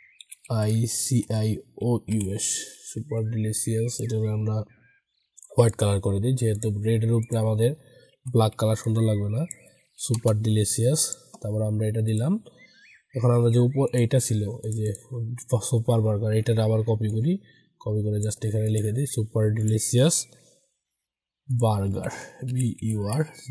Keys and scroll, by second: 2.9 ctrl+a, 8.0 ctrl+t, 21.7 ctrl+a.